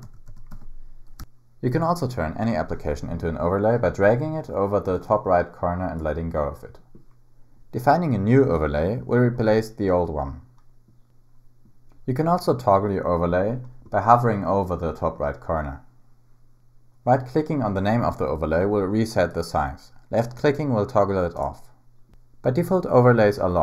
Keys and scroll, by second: 0.0 super+w, 0.3 super+w, 0.5 super+w.